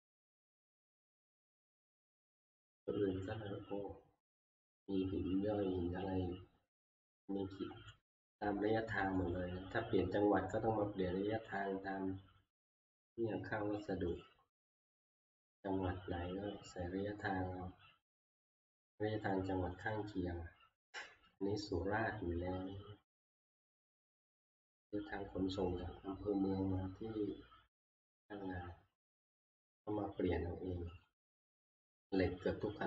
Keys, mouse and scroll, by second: 0.1 click, 0.4 click, 0.4 scroll, 1.7 scroll, 6.0 scroll, 6.6-6.9 scroll down 3, 7.9 scroll down 1, 9.3 click, 9.3 scroll up 1, 12.1-19.3 drag, 19.9-25.0 drag, 27.3 scroll, 31.1 click, 32.6-32.8 drag.